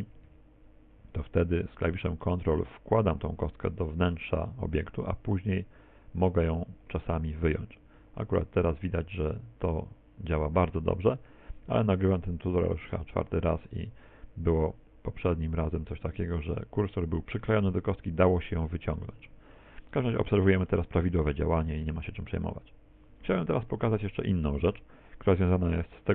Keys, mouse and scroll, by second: 0.3 g, 19.9 middle click, 20.7 middle click.